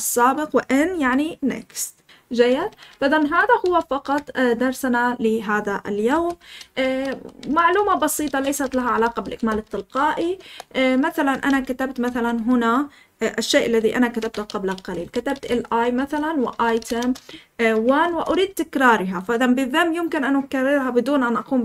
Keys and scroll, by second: 2.3 ctrl+n, 6.1 Escape, 6.4-9.9 typing, 10.3 Return, 11.0-18.0 typing, 14.9 Escape.